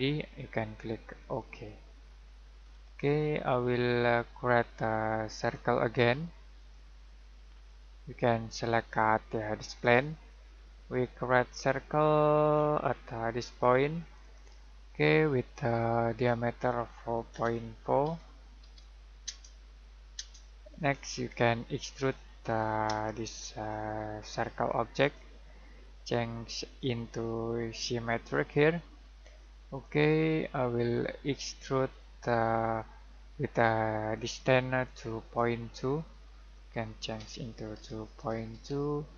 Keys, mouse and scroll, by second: 2.0 scroll down 1, 2.2-3.7 scroll up 1, 3.7 middle click, 5.4 click, 12.5-14.2 scroll down 1, 14.2 click, 17.3 4, 18.3-19.1 typing, 19.2 Return, 21.9 click, 23.0 middle click, 25.0 click, 29.8 click, 34.1 click, 37.1 typing, 38.3-39.0 typing.